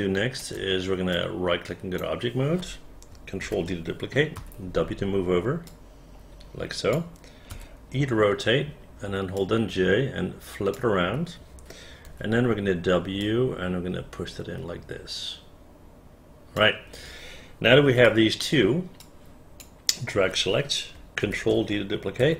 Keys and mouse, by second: 1.3 right click, 3.6 ctrl+d, 4.5 w, 5.8-7.1 drag, 7.6 e, 8.9 j, 9.5-10.9 drag, 12.2 w, 15.3-16.7 drag, 18.2 alt+click, 19.2-20.7 drag, 21.4 ctrl+d.